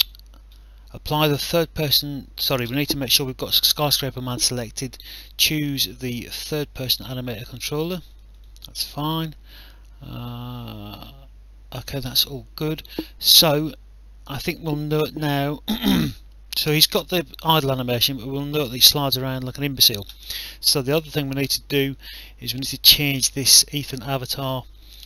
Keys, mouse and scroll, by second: 0.0 click, 6.8 click, 8.1 click, 14.4 click, 17.8 w, 19.3 click, 20.9 click, 24.4 click.